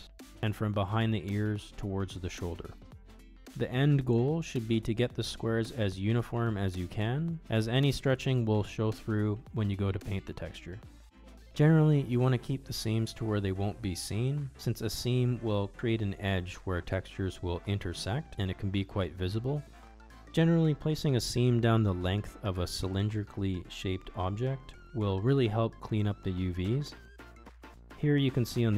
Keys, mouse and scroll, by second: 0.4 ctrl+e, 4.5-9.8 middle drag, 10.3 middle click, 11.7 shift+middle click, 12.4 middle click, 14.9 middle click, 16.2 alt+shift+click, 17.2 alt+shift+click, 17.8 middle click, 18.9 ctrl+e, 21.5 middle click, 22.2 shift+click, 23.1 middle click, 24.0 shift+click, 24.4 shift+click, 25.1 shift+click, 25.4 middle click, 26.3 middle click, 26.6 ctrl+z, 27.3 shift+click, 27.6 middle click.